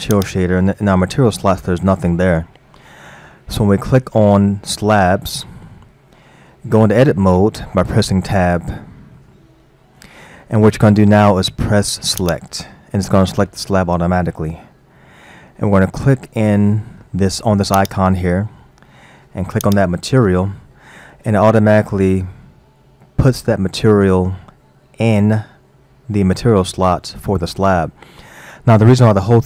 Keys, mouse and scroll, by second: 0.1 click, 6.3-7.2 scroll up 2, 7.5 Tab, 9.2-12.2 shift+middle drag, 12.2-12.8 drag, 17.8-20.8 drag.